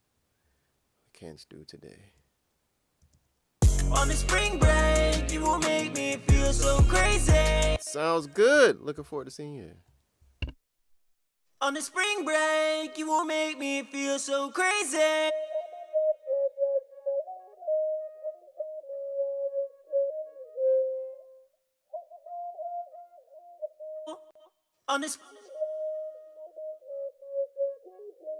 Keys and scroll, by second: 8.9 shift+s.